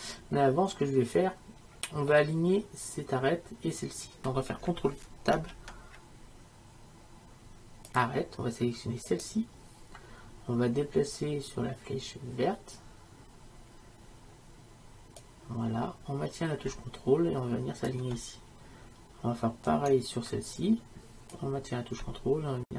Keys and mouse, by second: 0.5-5.4 middle drag, 5.4 ctrl+Tab, 9.2-17.9 right drag, 19.8-22.7 right drag.